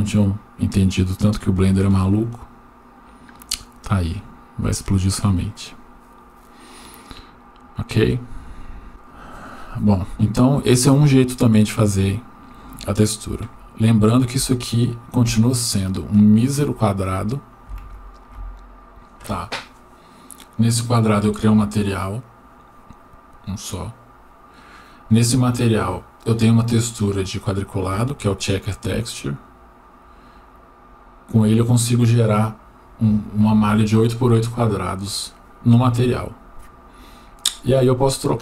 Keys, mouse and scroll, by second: 3.1 click, 11.9-14.2 scroll down 1, 14.6 Tab, 15.3 Tab, 16.2 click.